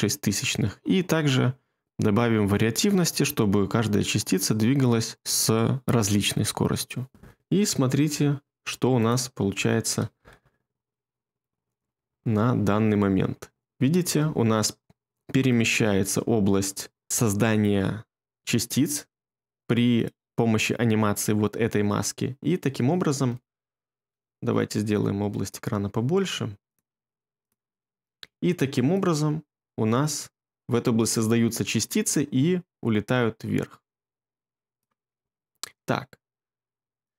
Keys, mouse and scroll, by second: 10.1 space, 14.1 space, 23.3 ctrl+middle click.